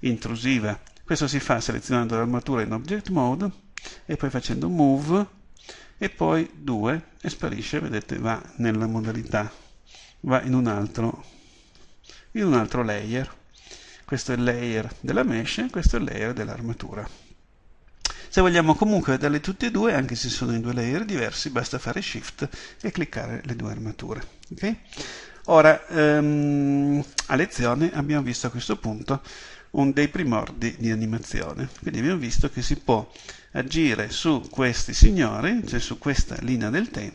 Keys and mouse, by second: 20.5-27.2 drag, 27.2-37.1 middle drag.